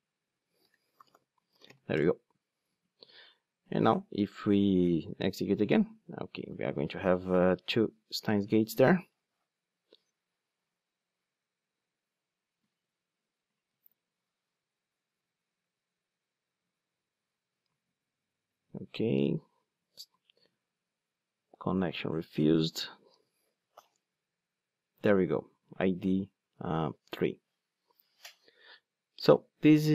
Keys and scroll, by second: 13.5 ctrl+d, 23.1 ctrl+d.